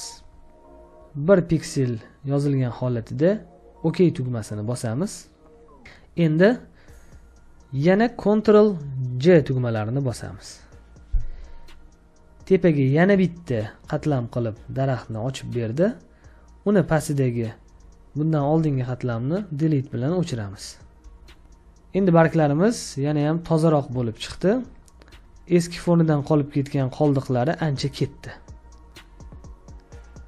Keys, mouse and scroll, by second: 10.0 ctrl+j, 21.0 Delete, 21.8 space, 22.0 ctrl+click, 24.8 ctrl+click, 25.7 ctrl+click, 27.1 ctrl+click, 29.2 ctrl+click.